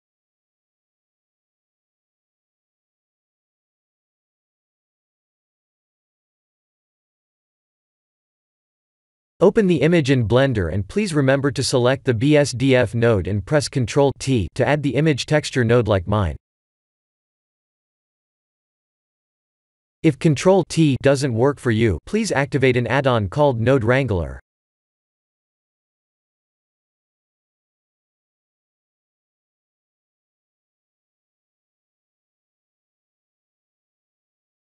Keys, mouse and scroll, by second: 12.6 click, 14.6 click, 15.4 click, 20.3-20.9 scroll down 3, 20.9-23.2 scroll up 8, 23.2 middle click, 27.6 scroll down 3, 28.2 middle click, 28.2-28.7 scroll down 1, 29.2 scroll down 2, 30.5 KP_1.